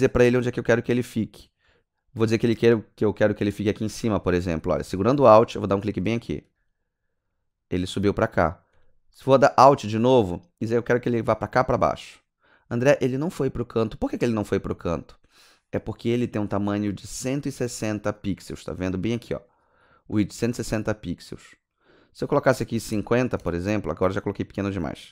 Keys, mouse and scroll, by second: 11.6 alt+click, 19.5 click, 21.7 click, 22.7 KP_5, 22.9 KP_0, 23.4 KP_Enter, 24.2 click.